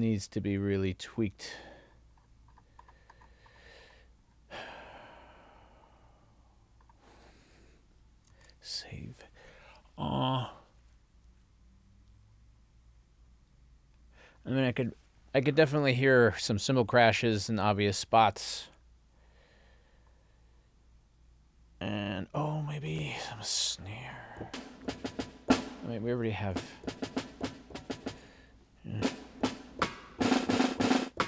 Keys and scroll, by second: 8.4 super+s.